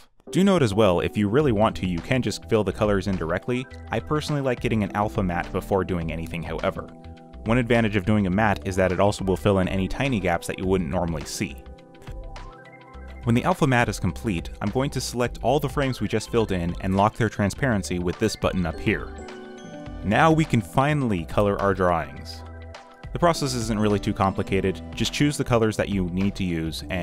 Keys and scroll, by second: 1.2 z, 1.5 q, 2.2 y, 5.3 g, 9.7 alt+Delete, 10.2 w, 10.9 Delete, 11.4 Delete, 11.5-13.5 typing, 24.2 space, 24.3 z, 25.6 x, 26.7-27.0 typing.